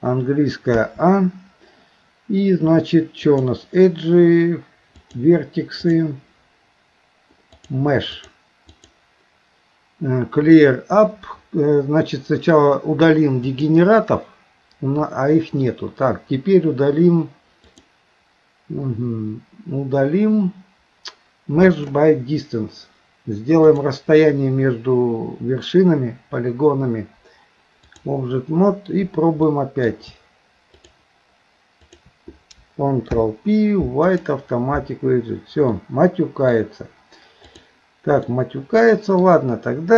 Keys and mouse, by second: 0.8 a, 3.2-5.0 drag, 6.0-7.6 drag, 8.7-13.7 drag, 17.7-21.9 drag, 23.6-28.1 drag, 29.5 middle click, 31.9 shift+click, 33.1 ctrl+p, 35.8 middle click, 37.5 click, 38.3 middle click.